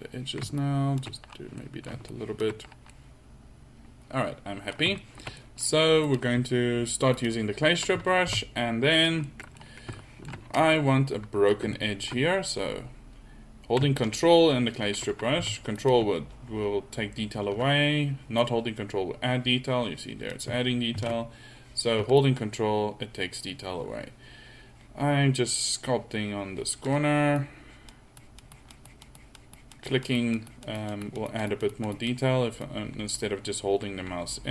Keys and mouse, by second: 0.6-1.8 middle drag, 8.3 f, 13.8-15.0 middle drag, 15.4 f, 18.4-18.8 drag, 21.6 ctrl+z, 22.2-24.2 drag, 27.4-29.7 drag.